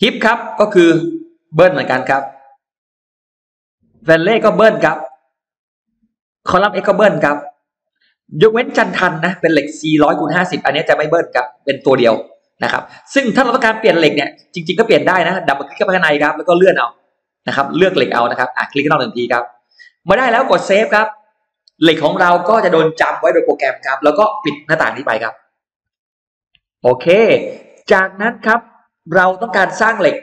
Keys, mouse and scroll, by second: 1.0 click, 1.7 typing, 2.2 click, 4.0 click, 4.3 click, 4.7 2, 5.2 click, 6.3 click, 6.5 click, 7.3 click, 15.3 click, 15.5 click, 16.3-17.5 scroll down 3, 18.6 click, 21.1 click, 25.5 click, 26.0 click, 26.6 scroll down 1.